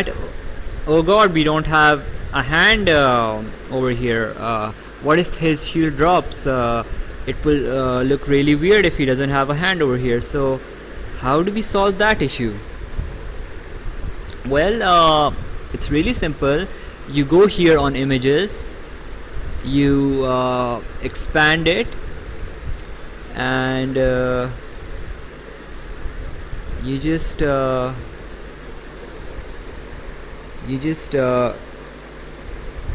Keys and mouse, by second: 13.7 click, 18.2 click, 21.2 click.